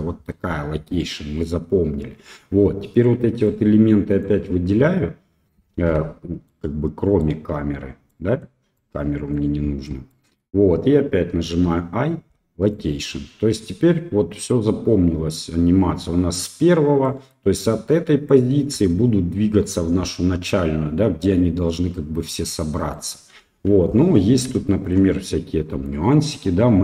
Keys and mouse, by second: 3.5-4.2 drag, 6.5-7.2 middle drag, 8.1-8.4 middle drag, 8.9-9.3 drag, 10.1 middle click, 17.0 middle click, 20.5-22.9 drag, 23.4 KP_1, 24.7 shift+middle drag, 25.8-26.8 drag.